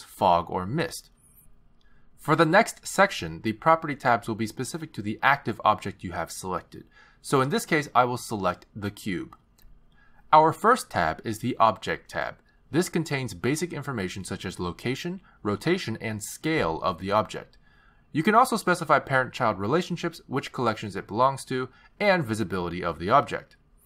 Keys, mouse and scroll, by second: 9.4 click, 12.1 click, 19.2-20.0 scroll down 2, 20.0 click, 20.9-22.9 scroll down 7, 21.7 click, 23.0 click, 23.2-23.8 scroll down 3.